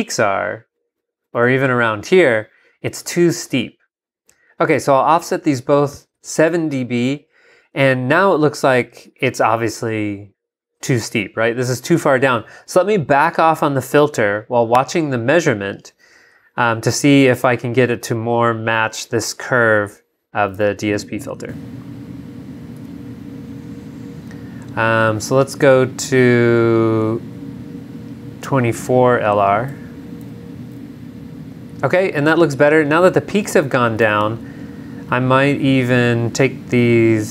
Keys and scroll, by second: 0.7 super+Down, 20.5 g, 22.8 super+Tab, 29.7 super+Tab, 30.2 super+v, 36.7 super+Down.